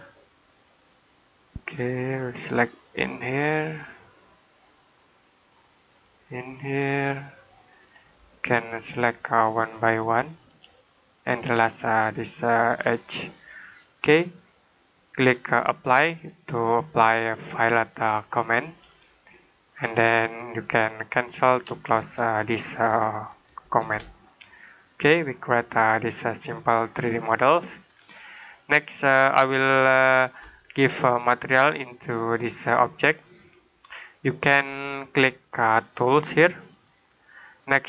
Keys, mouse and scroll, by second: 12.3 click, 13.7 middle click, 17.8 click, 19.2 middle click, 21.4 click, 24.0 shift+middle click, 32.1 click, 33.3 middle click, 36.6 click.